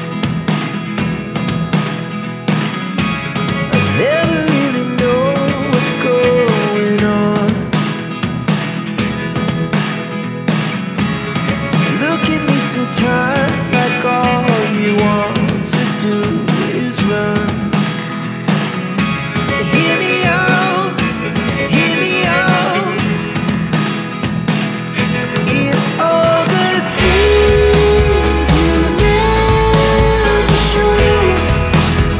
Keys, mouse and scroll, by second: 1.6 5, 3.9 click, 6.6 click, 7.6 1, 9.9 click, 12.3 click, 13.4 2, 15.8 click, 17.9 click, 20.2 click, 22.1 click, 24.1 click, 27.2 click, 29.2 click, 30.3 3.